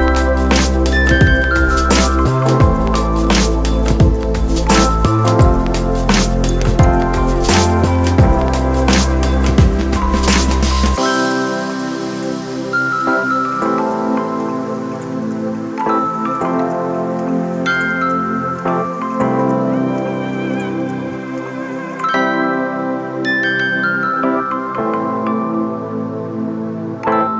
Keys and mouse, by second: 5.3 click, 13.6 click, 15.3-22.3 drag, 25.0 click.